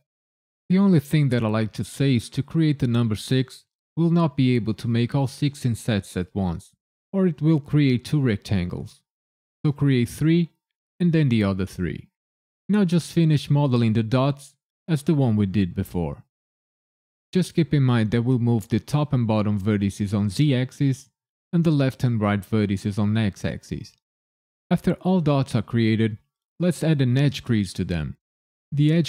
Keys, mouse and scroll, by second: 0.2 KP_Enter, 0.6 shift+r, 1.4 ctrl+KP_Subtract, 1.9 g, 2.1 z, 2.3 KP_1, 2.6 KP_Subtract, 2.9 KP_Enter, 3.5 KP_9, 4.2 click, 4.6 ctrl+KP_Add, 5.0 i, 5.1 KP_Decimal, 5.2 KP_5, 5.4 KP_Enter, 7.1-9.8 typing, 7.6 KP_Enter, 8.5 ctrl+KP_Subtract, 9.4 KP_Enter, 10.7 click, 11.3 shift+click, 11.6 shift+click, 11.9 shift+click, 12.2 ctrl+KP_Add, 12.6 i, 12.8 KP_Decimal, 13.0 KP_5, 13.2 KP_Enter, 13.5 right click, 14.7-17.7 typing, 15.3 KP_Enter, 16.0 ctrl+KP_Subtract, 17.0 KP_Enter, 18.5 click, 19.1 shift+click, 19.3 ctrl+KP_Add, 19.6 i, 19.7 KP_Decimal, 19.9 KP_5, 20.1 KP_Enter, 20.4 right click, 21.4-23.4 typing, 21.8 KP_Enter, 22.6 ctrl+KP_Subtract, 23.7 KP_Subtract, 24.0 KP_Enter.